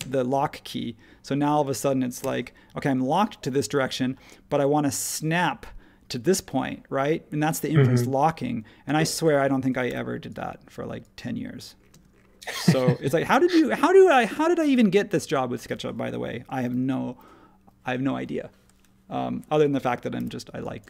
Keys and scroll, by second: 2.2 Left, 8.9 space, 9.8 e, 11.9 space, 13.3 super+1, 20.1 h.